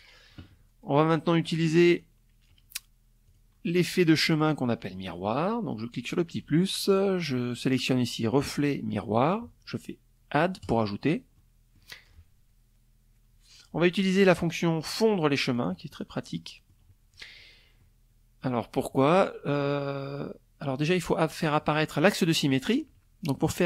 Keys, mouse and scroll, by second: 0.0 click, 0.4 click, 1.8 click, 2.8 click, 4.5 click, 9.1 click, 9.9 click, 14.1 click, 14.9 middle click, 16.3-17.5 middle drag.